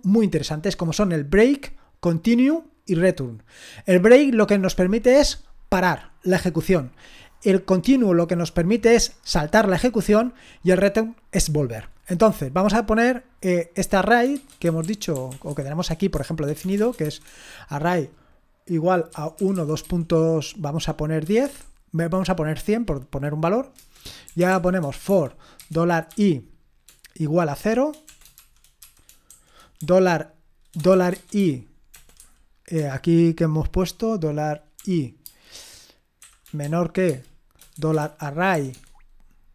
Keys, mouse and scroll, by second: 1.4-12.5 scroll down 1, 12.5-12.9 scroll down 1, 12.9 click, 14.1-17.1 typing, 18.8-21.4 typing, 23.8 Return, 24.0-26.1 typing, 27.6-29.8 typing, 30.9-32.8 typing, 34.8-39.5 typing.